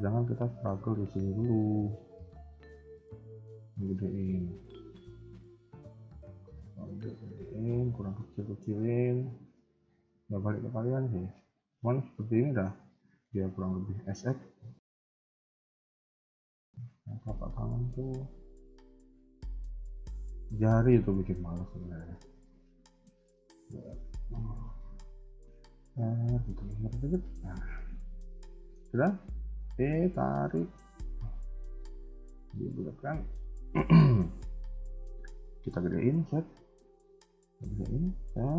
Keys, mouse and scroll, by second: 1.3 shift+middle click, 1.8 scroll up 2, 2.7 alt+click, 3.6 s, 5.2-5.6 scroll down 2, 5.7 shift+middle click, 6.0 scroll up 1, 6.2 s, 7.9 shift+middle click, 9.4 z, 10.1-10.5 scroll down 2, 10.7 scroll down 1, 10.7 KP_1, 12.0 KP_3, 12.1 KP_1, 12.4-13.2 scroll up 2, 13.4 s, 15.6 KP_3, 15.9 scroll down 2, 16.3 middle click, 16.8 KP_3, 17.3 shift+middle click, 17.6-18.1 scroll up 2, 18.2 shift+middle click, 18.6 scroll down 1, 19.1 KP_3, 19.3 KP_1, 20.4 alt+click, 20.8 shift+middle click, 21.9-22.3 scroll down 3, 22.3 Tab, 23.5 g, 25.3 r, 26.5 Tab, 27.2 shift+middle click, 27.8 scroll down 2, 28.4 shift+middle click, 29.4 e, 30.8 KP_1, 31.1 middle click, 32.6 KP_3, 32.8 KP_1, 33.3 shift+middle click, 34.5 s, 36.2 KP_3, 37.3 s, 38.4 KP_1.